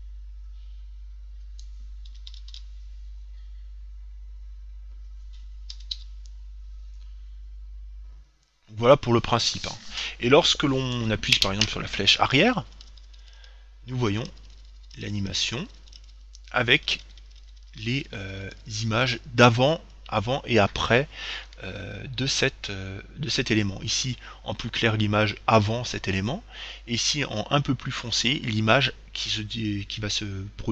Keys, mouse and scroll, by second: 12.8 Left, 16.8 Right, 18.4 Left.